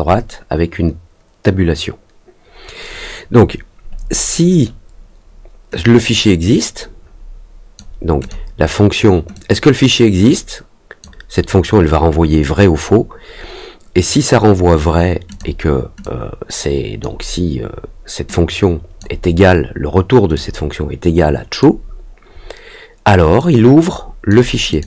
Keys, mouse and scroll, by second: 6.0-7.7 drag, 8.2 click, 9.3-10.9 drag, 15.2 click, 16.0 click, 18.2 click, 20.3-21.5 drag, 23.3 click, 24.6 click.